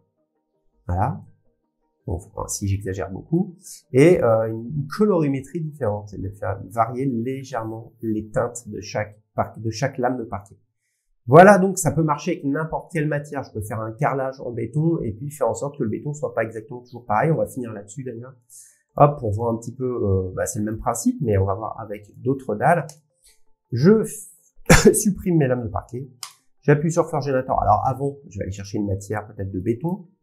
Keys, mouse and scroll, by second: 2.7 click, 6.6 click, 9.4 scroll, 10.3 scroll, 11.5 scroll up 10, 12.1 scroll, 18.4-20.5 drag, 22.1 click, 22.3 scroll, 22.9 click, 23.7 Delete, 24.4 middle click, 25.2 middle click, 26.3-27.5 click, 28.6 click, 29.8 scroll.